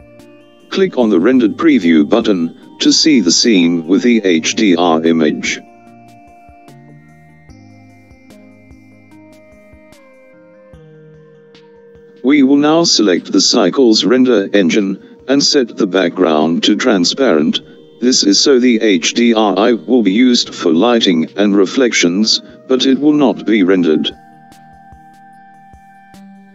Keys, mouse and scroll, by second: 11.5 click, 16.9-17.9 scroll down 2, 20.7-23.3 scroll up 3.